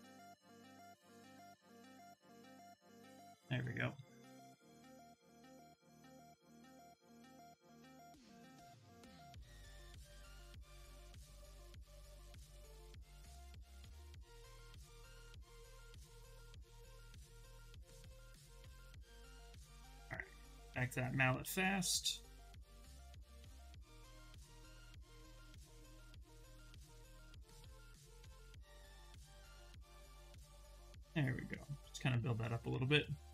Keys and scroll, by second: 0.6 2, 1.7 d, 10.3 d, 11.2 shift+f, 11.6 shift+f, 15.4 shift+f, 17.6 shift+f, 21.1 s.